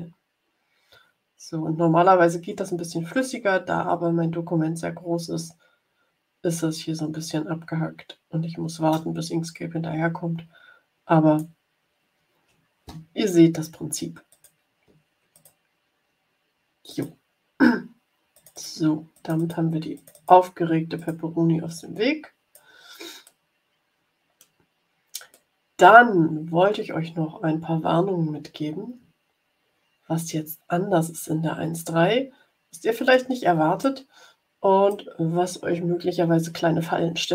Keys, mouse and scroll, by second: 14.2 click, 15.3 click, 16.8 click, 18.4 click, 19.1 click, 19.9 click, 20.9 click, 21.7-22.8 drag, 23.2 middle click, 24.3 middle click, 25.4-32.4 drag, 32.4 middle click, 33.8-35.0 drag, 35.7-37.3 drag.